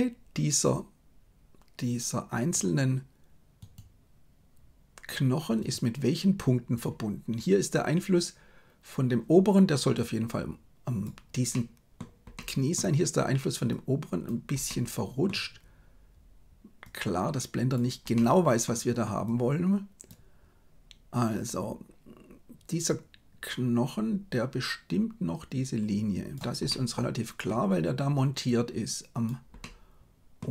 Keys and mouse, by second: 0.6-2.5 drag, 3.5 right click, 10.0-11.2 drag, 11.4 middle click, 12.3 middle click, 13.8 click, 14.6 middle click, 16.8-17.9 drag, 18.1 middle click, 19.2 click, 24.4-26.4 drag, 26.6 middle click, 28.6 click, 29.5 middle click.